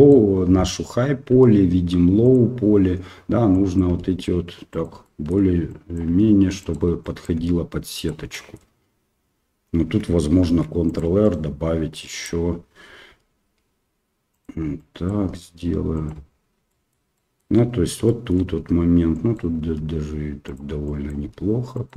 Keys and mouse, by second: 1.3 g, 3.6 click, 3.9 g, 5.1 shift+middle click, 5.8 click, 6.0 g, 7.1 click, 7.3 g, 8.4 shift+middle click, 10.5 ctrl+r, 11.9-13.1 drag, 13.1 g, 14.7 click, 15.2 g, 16.8 shift+middle click, 17.2 shift+middle click, 18.1 shift+middle click, 19.1 click, 19.6 g, 20.9 click, 21.2 g.